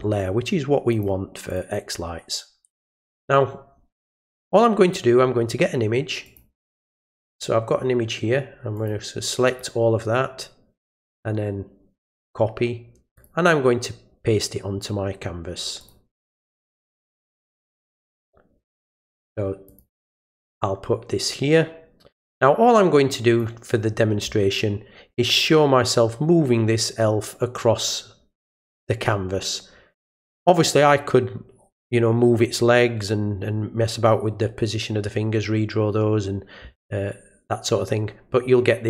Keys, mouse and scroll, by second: 0.9 click, 1.5 click, 6.3 click, 8.8 click, 9.5 click, 10.9 click, 12.2 click, 13.2 click, 15.8 click, 17.0 click, 19.7 click, 20.6-23.4 drag.